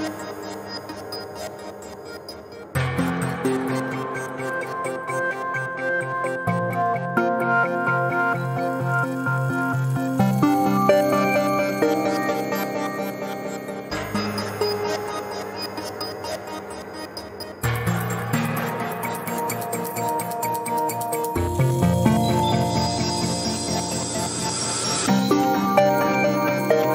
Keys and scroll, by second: 0.0 x, 14.1 Delete, 21.9 g, 23.4 x, 26.5 g.